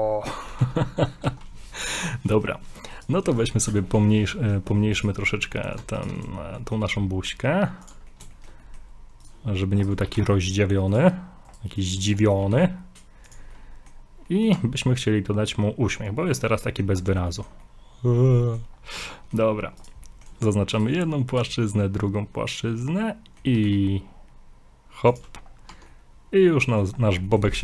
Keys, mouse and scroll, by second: 0.6 ctrl+z, 0.8 middle click, 1.3 ctrl+z, 1.8 shift+middle click, 3.0 right click, 3.6 shift+right click, 3.9 middle click, 4.4 middle click, 5.0 shift+right click, 6.0 ctrl+right click, 6.6 middle click, 6.8 g, 8.1 middle click, 8.3 shift+middle click, 8.6 middle click, 9.2 right click, 10.0 shift+right click, 10.1 g, 11.5 shift+right click, 11.8 shift+right click, 12.2 middle click, 12.4 g, 13.5 middle click, 14.3 middle click, 14.5 Tab, 14.8 scroll down 2, 16.1-16.5 scroll up 3, 16.4 middle click, 17.0 scroll down 4, 17.3 shift+middle click, 17.3 shift+middle click, 17.6 middle click, 18.6 scroll up 4, 19.1 middle click, 19.2 middle click, 19.8 right click, 20.1 middle click, 21.1 middle click, 25.5 scroll down 3, 25.7 Tab, 25.9 middle click, 27.2 scroll down 1, 27.3 middle click.